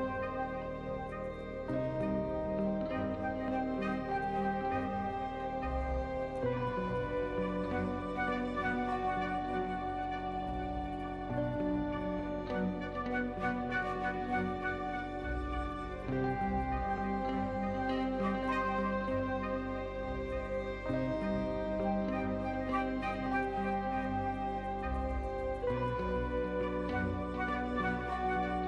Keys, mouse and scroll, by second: 4.4 middle click, 4.9 middle click, 5.2 z, 6.5 /, 6.6 click, 7.1 1, 7.6 click, 8.6 /, 9.4 click, 10.3 ctrl+KP_Add, 10.8 ctrl+KP_Add, 11.0 ctrl+KP_Add, 11.2 ctrl+KP_Add, 11.7 ctrl+KP_Add, 12.4 x, 13.2 click, 14.3 2, 15.9 s, 17.4 g, 19.4 click, 19.8 s, 22.5 s, 24.0 Tab, 24.6 drag, 25.5 middle click, 25.7 shift+middle drag, 26.2 middle click, 26.5 shift+middle drag, 27.2 click, 28.6 Tab.